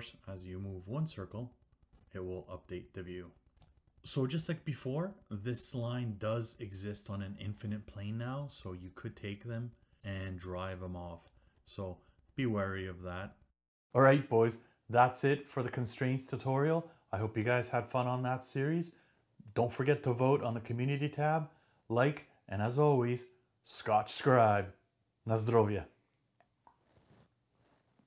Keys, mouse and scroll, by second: 3.8 click, 11.4 click.